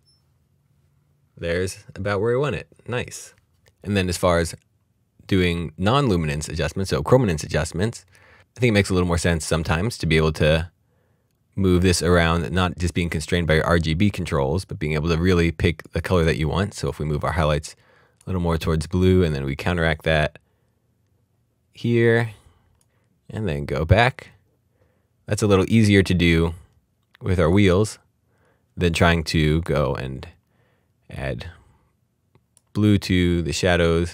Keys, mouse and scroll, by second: 10.6 click, 29.5 click, 31.1 click.